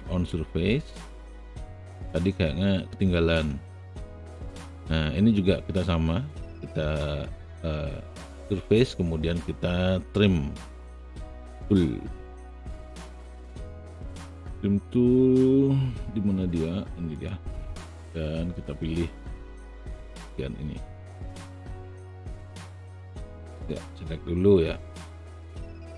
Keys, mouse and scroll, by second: 0.2-1.4 drag, 0.7 space, 3.0 ctrl+alt+click, 4.3 ctrl+alt+right click, 17.2 click.